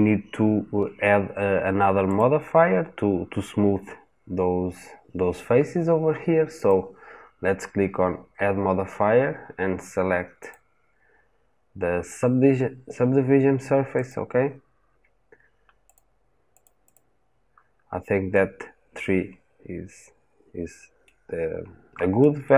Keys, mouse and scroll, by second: 2.0 click, 16.5-18.1 drag, 18.1-21.2 middle drag, 21.2-21.8 scroll down 2, 21.8-22.3 scroll up 2, 22.3-22.5 middle drag.